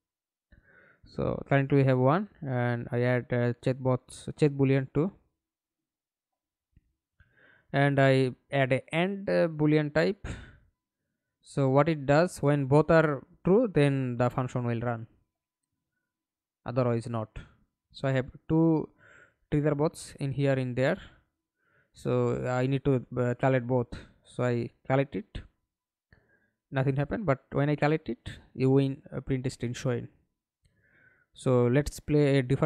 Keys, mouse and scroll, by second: 0.3 double click, 1.6-2.1 scroll up 1, 2.1 scroll up 1, 6.0-6.8 typing, 7.1 Return, 17.6 middle click, 18.6 F11, 19.5 alt+p, 22.8-27.7 typing, 28.7 s, 28.8 s, 29.8 Escape, 30.8 alt+p, 31.9-32.6 w.